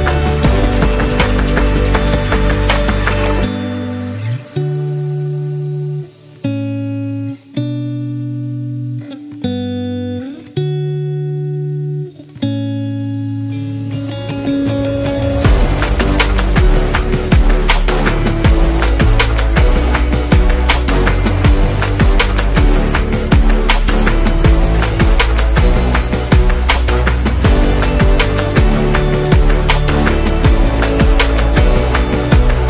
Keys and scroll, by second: 3.0-3.3 typing, 6.5-7.0 typing, 8.6 space, 9.2 space, 10.6 super+-, 11.8 v, 12.0 space, 20.2-22.1 typing, 22.4 Return, 29.3-31.7 typing, 31.1 Return.